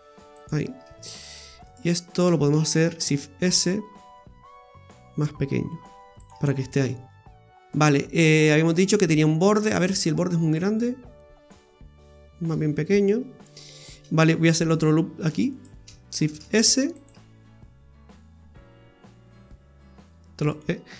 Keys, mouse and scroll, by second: 1.3 right click, 1.7 alt+shift+right click, 1.8 right click, 2.7 shift+s, 4.0 s, 6.9 scroll down 1, 7.4 middle click, 9.5-10.5 scroll down 12, 10.5 middle click, 12.7-14.7 scroll up 12, 14.7 right click, 15.3 alt+shift+right click, 15.5 right click, 16.3 shift+s, 17.1 s.